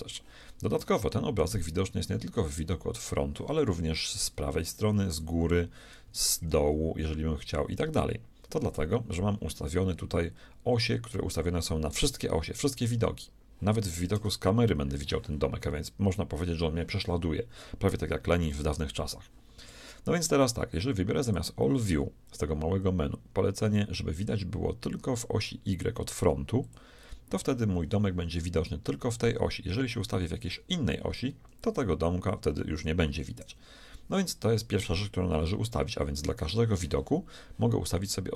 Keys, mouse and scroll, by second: 1.0-4.2 middle drag, 4.2 KP_3, 5.0 KP_7, 6.4 ctrl+KP_7, 7.9 KP_1, 14.2 KP_0, 18.4 KP_1, 21.2-23.2 drag, 30.4 KP_3, 31.4 KP_7, 32.5 KP_1, 32.9 KP_3, 33.1 KP_7, 33.5 KP_1.